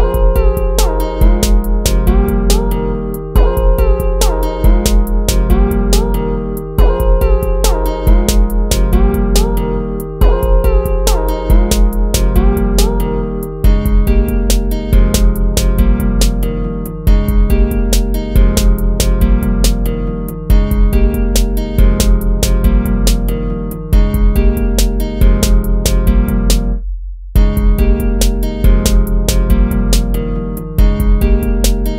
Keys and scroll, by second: 5.2 ctrl+-, 7.8 ctrl+-, 9.1 ctrl++, 15.5 ctrl+-, 15.8 ctrl+z, 21.3 ctrl+-, 22.4 ctrl+z, 24.7 ctrl+-, 25.6 ctrl+-, 26.0 ctrl+-, 27.0 ctrl++, 29.4 ctrl+-, 29.5 ctrl++.